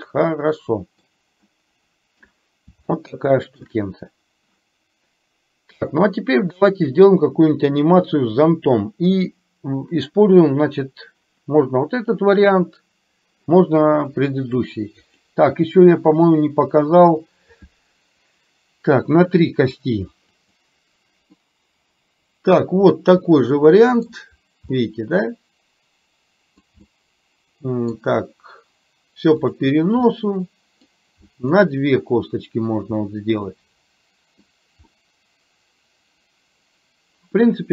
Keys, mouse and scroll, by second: 0.4 middle click, 1.5 middle click, 3.0 shift+middle click, 16.3-20.9 drag, 21.5-23.0 middle drag, 23.3-24.4 middle drag, 24.9-26.7 middle drag, 26.9-28.2 middle drag, 30.3-31.7 middle drag, 33.2-34.5 middle drag, 35.0-37.7 middle drag.